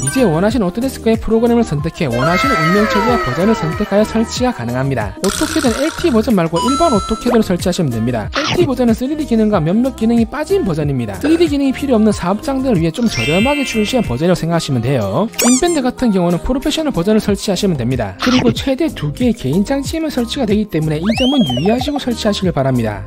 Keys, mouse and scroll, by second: 0.0 click, 4.6 click, 6.8 scroll down 1, 9.1 click, 9.5 click, 10.6 click, 15.8 click, 17.1 click, 18.3 click, 18.9 click, 20.3 click, 22.7 click.